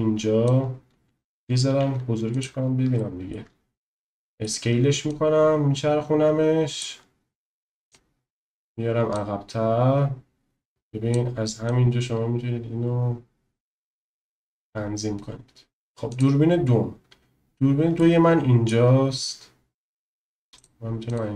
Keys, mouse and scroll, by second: 1.8 s, 2.4 click, 3.0-3.4 middle drag, 4.1 middle click, 5.1 click, 8.0 click, 10.7 click, 11.7-15.7 drag, 16.0 click, 17.9 shift+middle click, 20.5 click, 21.1 click.